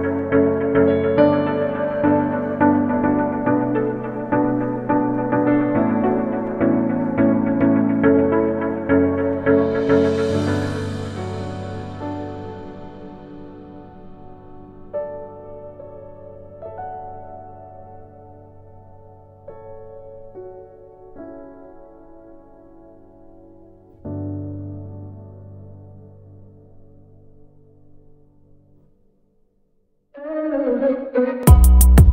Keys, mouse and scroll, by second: 2.5-3.7 middle drag, 6.8-7.9 middle drag, 8.7-10.1 middle drag, 10.1-11.8 drag, 11.8 middle click, 12.1 middle click, 17.8 middle click, 18.1-19.5 middle drag, 20.9 middle click, 21.2 middle click, 21.4 middle click, 22.1 middle click, 25.0 middle click, 26.6 middle click, 26.9 middle click, 28.2 middle click, 29.5 middle click, 31.3 middle click.